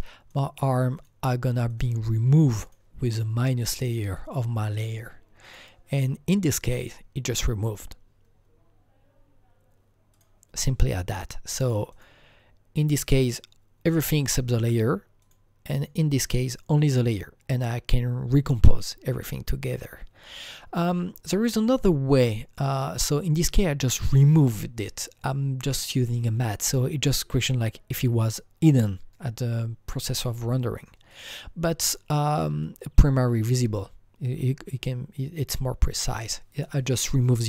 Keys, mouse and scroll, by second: 0.3 click, 0.6 click, 0.9 click, 1.7 click, 1.8 click, 2.6 click, 5.4 click, 10.1 click, 11.6 click, 15.2 click, 15.3 double click, 17.9 click, 20.7 click, 20.7 click, 22.3 click, 22.5 click, 30.0 click, 31.1 click, 32.6 click, 33.0 double click.